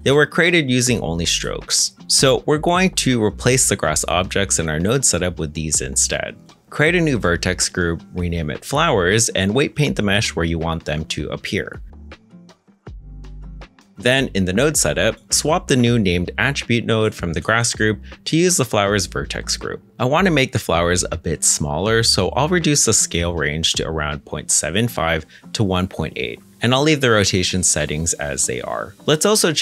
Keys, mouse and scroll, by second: 0.2-0.7 scroll down 1, 0.7-1.4 scroll up 1, 1.4-2.0 scroll down 1, 2.0-4.4 scroll up 1, 8.5-9.6 typing, 12.1 middle click, 13.9 ctrl+Tab, 14.3-14.9 scroll up 1, 14.9 middle click, 17.3 l, 17.3 shift+f, 17.4 o, 19.9-20.7 scroll down 1, 20.7 middle click, 21.5-22.8 scroll up 1, 23.6 ., 23.8 7, 24.0 5, 24.1 Return, 26.6 1, 26.8 Return, 26.8 8, 29.2 BackSpace, 29.3 8.